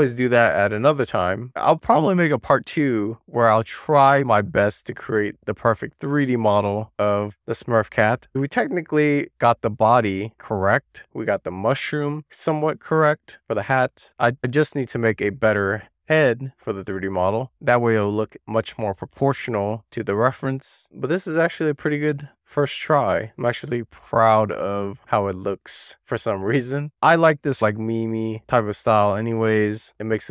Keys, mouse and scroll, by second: 5.7 shift+middle click, 6.4-9.5 middle drag, 10.0 scroll up 1, 10.2 shift+middle click, 11.0-12.6 scroll up 4, 12.6-13.8 scroll down 2, 14.0-14.6 scroll down 2, 14.6-16.3 scroll up 1, 16.3-16.8 scroll down 2, 17.1 shift+middle click, 20.9-25.3 middle drag, 25.4 scroll up 1, 25.6-26.4 scroll down 4, 26.4-27.1 scroll down 2, 27.1 scroll up 1, 27.2 shift+middle click, 28.0-28.6 scroll up 2, 29.6 scroll up 2, 29.8 middle click.